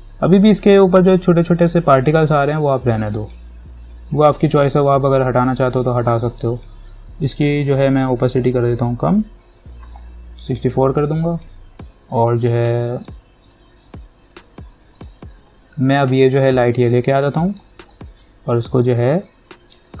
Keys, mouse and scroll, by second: 4.0 click, 8.0 click, 10.4-11.3 typing, 11.7-18.3 drag, 18.3 ctrl+-.